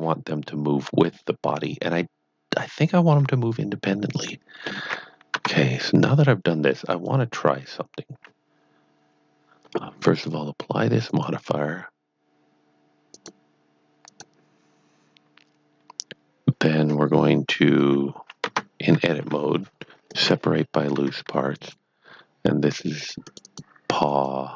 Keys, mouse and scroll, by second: 0.4 middle click, 1.6 middle click, 4.3 middle click, 5.3 Tab, 6.1 middle click, 6.9 click, 11.0 click, 17.7 click, 17.8 p, 18.4 Tab, 19.2 p, 20.1 click, 21.5 click, 23.3 click, 23.4 double click, 24.1 click.